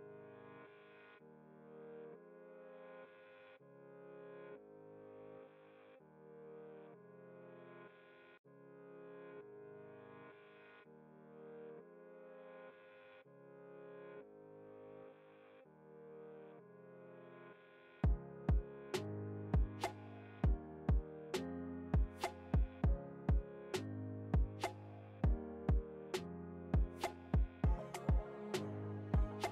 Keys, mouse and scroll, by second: 3.4-5.3 drag, 5.3 alt+scroll down 1, 6.3-10.7 drag, 10.7-18.5 alt+shift+drag, 18.5 Return, 19.5 alt+scroll up 1, 21.8 click, 24.0-26.0 typing, 27.2 click.